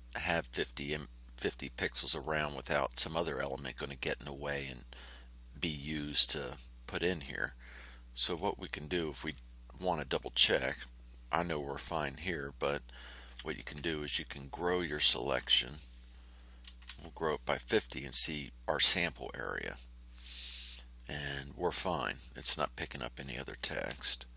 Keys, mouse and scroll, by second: 2.0 click, 13.2 g, 15.2 click, 16.6 KP_5, 16.8 KP_0, 17.7 click.